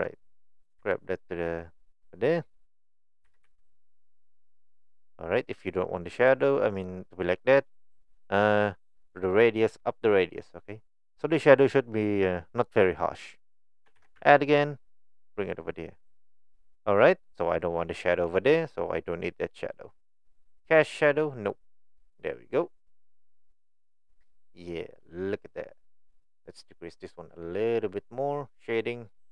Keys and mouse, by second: 3.3 g, 4.5 middle click, 9.5-10.7 drag, 14.0 shift+d, 21.5 click, 22.1 click, 22.8-23.4 middle drag, 24.2 middle click, 25.9 click.